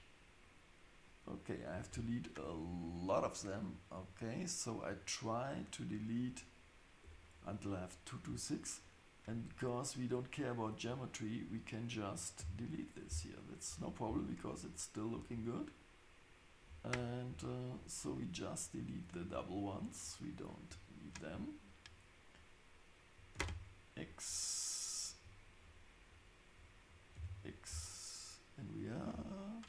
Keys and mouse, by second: 7.0 Tab, 9.4-13.2 drag, 12.4 x, 13.7 Tab, 15.1 Tab, 16.7 Tab, 17.3 Tab, 19.4-24.1 drag, 23.3 x, 25.7-27.8 drag, 27.2 x.